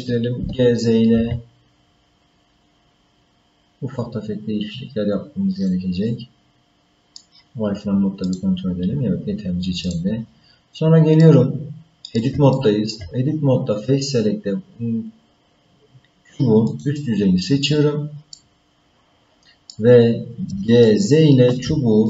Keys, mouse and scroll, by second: 0.4 g, 6.0-7.2 middle drag, 8.3 click, 9.9 click, 10.6 scroll down 1, 11.2-12.2 middle drag, 12.5 shift+middle click, 13.5-14.2 scroll up 2, 16.7 click, 17.2-18.3 scroll down 3, 18.3-19.7 middle drag, 20.8 ctrl+middle click.